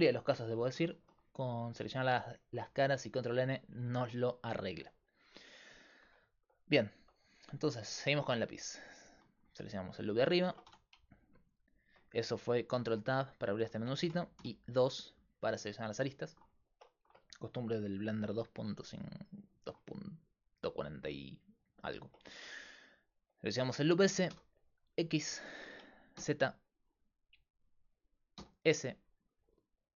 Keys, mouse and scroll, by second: 1.3-7.1 middle drag, 7.1 right click, 7.6 Tab, 8.9-10.4 right drag, 10.4 ctrl+Tab, 12.7 ctrl+Tab, 15.8-19.6 right drag, 16.2-19.6 drag, 24.3 e, 28.4 s.